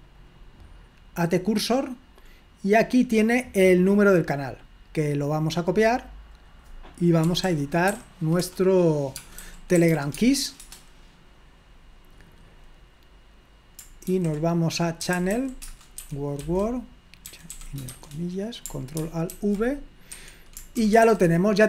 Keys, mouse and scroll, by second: 0.0 click, 1.5-2.8 drag, 4.3-6.8 drag, 7.1-10.4 typing, 10.6 Return, 14.8-17.3 typing, 19.3 ctrl+alt+v, 20.2 Escape, 20.6-21.6 typing.